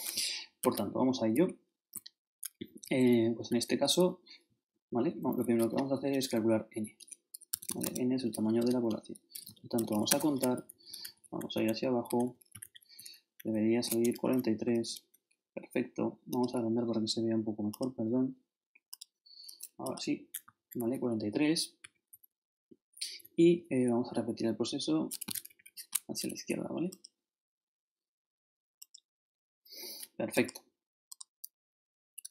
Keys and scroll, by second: 0.7 ctrl+shift+Left, 2.6 ctrl+shift+Down, 4.7 shift+Up, 6.3 shift+n, 7.5 shift+Tab, 8.6-10.3 typing, 10.5 shift+Down, 11.5 shift+super+Down, 13.5 shift+super+Up, 14.0 shift+Return, 14.6 shift+super+Return, 14.7 shift+super+Up, 20.5 shift+super+Up, 21.0 shift+super+Up, 21.3 shift+super+Down, 21.8 shift+Left, 22.1 shift+Down, 25.4 shift+Left.